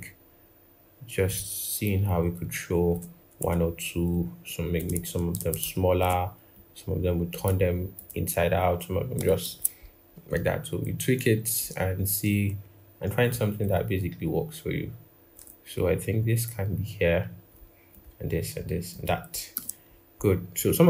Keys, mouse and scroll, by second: 2.2 alt+click, 5.3 shift+click, 9.2 ctrl+=, 10.0 scroll up 1, 13.6 alt+click, 19.3 ctrl+-, 20.1-20.4 scroll, 20.4-20.8 scroll down 1.